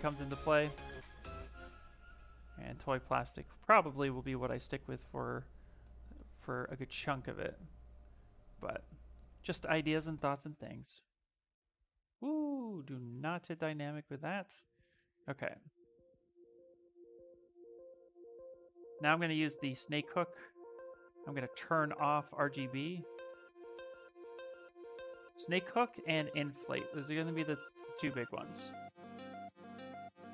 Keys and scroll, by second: 0.0 space, 9.7-11.3 typing, 12.6 shift+d, 15.6 s, 19.9 space, 20.8 space, 23.6 s, 25.5-26.7 typing, 28.3 space, 29.4 ctrl+z, 29.6 ctrl+z.